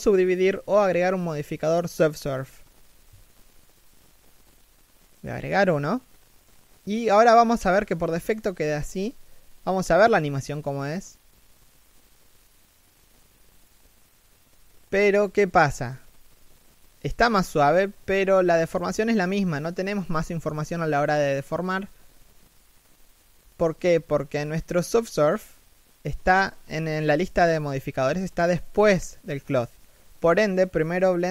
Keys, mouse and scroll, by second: 9.4 middle click, 10.2 scroll down 1, 10.4 shift+middle click, 14.6 shift+middle click, 15.0 scroll up 1, 15.6 middle click, 17.5 scroll down 1, 17.8 shift+middle click, 18.1 scroll up 1, 19.9 scroll up 1, 21.1 shift+middle click, 25.8-26.3 scroll down 1, 26.3 shift+middle click.